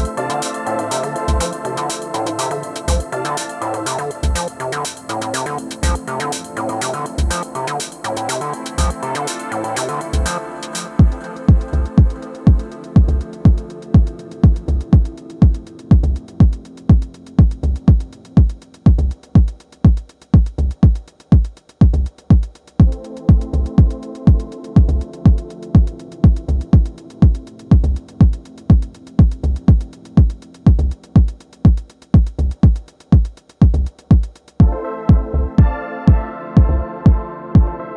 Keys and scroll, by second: 19.9 super+s, 20.4 Return, 32.9 space.